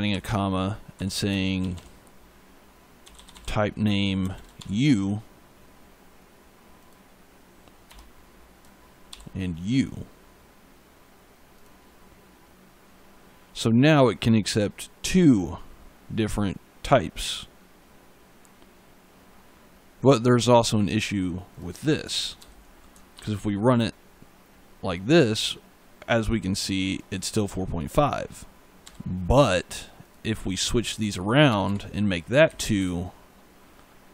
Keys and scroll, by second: 0.0 space, 0.8 t, 1.4 p, 2.6-4.4 typing, 7.7 BackSpace, 8.9 shift+u, 22.2 ctrl+s, 23.0 ctrl+F5, 28.7 e, 31.3 BackSpace, 32.3 Right.